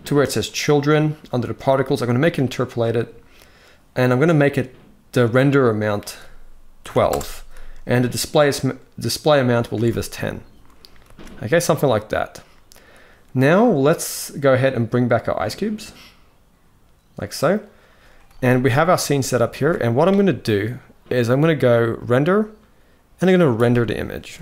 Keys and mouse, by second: 0.1 click, 1.8 click, 5.5-6.8 drag, 9.4 alt+a, 10.8 ctrl+s, 18.0 ctrl+s, 18.3 ctrl+s, 18.7 shift+middle click, 19.2 ctrl+s, 21.6-24.4 drag.